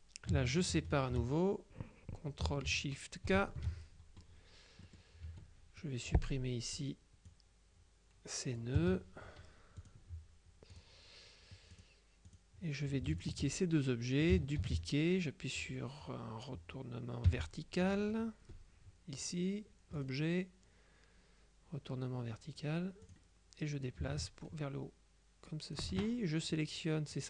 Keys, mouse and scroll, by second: 3.3 ctrl+shift+k, 4.9 click, 5.3 F2, 5.9-9.2 drag, 8.9 BackSpace, 9.9 click, 10.8 click, 11.8 click, 13.2 shift+click, 14.7 ctrl+d, 17.3 v, 20.1 click, 23.1 click, 23.9-26.3 ctrl+drag, 26.6 click.